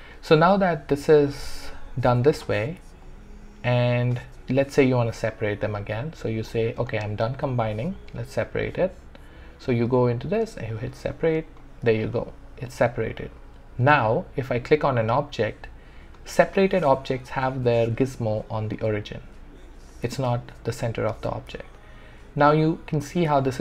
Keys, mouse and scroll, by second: 0.0 ctrl+z, 0.1-7.6 alt+drag, 7.6 click, 10.7 click, 12.0-13.8 alt+drag, 20.1 click, 20.1-21.7 alt+drag, 21.7-23.4 alt+drag, 23.4-23.6 alt+drag.